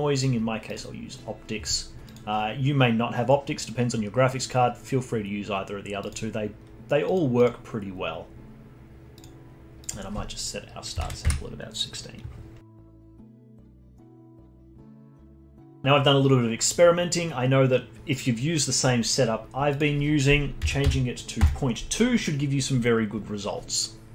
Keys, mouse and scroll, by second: 2.0-5.2 drag, 7.1 click, 7.3-12.8 drag, 13.1 alt+middle click, 13.5 alt+click, 14.0-14.7 scroll up 1, 14.7-17.7 alt+middle drag, 19.7-22.7 drag.